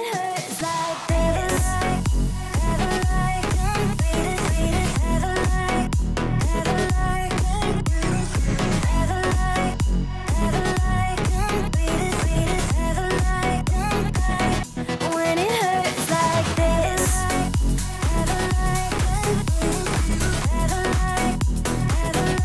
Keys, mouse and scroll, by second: 6.2-7.2 drag, 14.5 click.